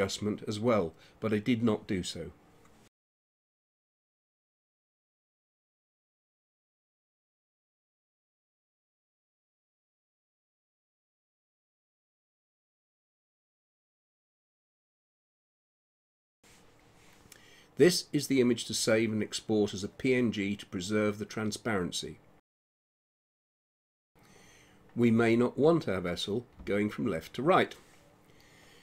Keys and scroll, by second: 21.6-23.3 typing.